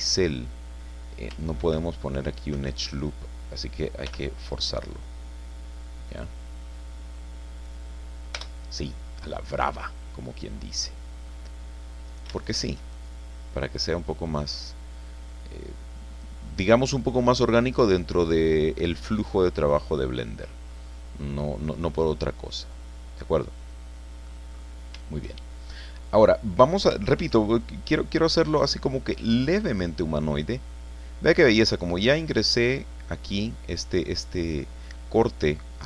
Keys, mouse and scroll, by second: 0.2-0.5 scroll up 2, 1.6 ctrl+r, 2.5 Escape, 4.0 k, 6.1 click, 7.6 click, 8.4 Return, 8.9 scroll down 2, 9.2-11.4 drag, 12.1 shift+right click, 12.4 shift+right click, 13.0-16.4 shift+drag, 16.6 middle click, 18.8-19.1 scroll down 2, 19.3-20.6 drag, 20.6 scroll up 2, 21.0 scroll down 2, 21.4-24.4 drag, 24.4-24.9 scroll up 2, 27.2 ctrl+r, 27.6 ctrl+click, 31.3 click, 32.0 click, 35.4-35.8 drag.